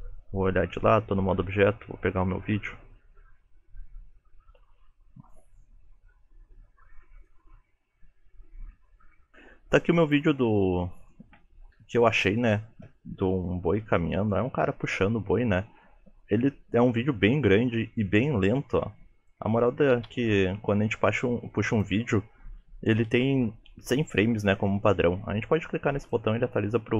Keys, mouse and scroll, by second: 0.0 KP_3.